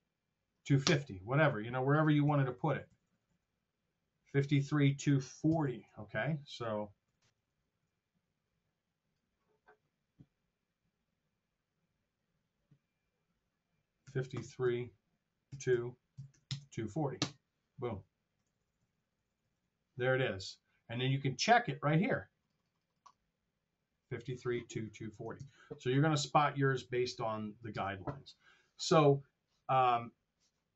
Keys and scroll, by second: 0.7 Return, 2.2 t, 5.6 super+z, 7.0 r, 14.0 KP_3, 14.5 Right, 15.4 KP_2, 15.6 Right, 16.0 KP_2, 16.2 KP_4, 16.4 KP_0, 17.1 Return, 18.3 t, 25.3 super+Tab, 27.8 super+Tab.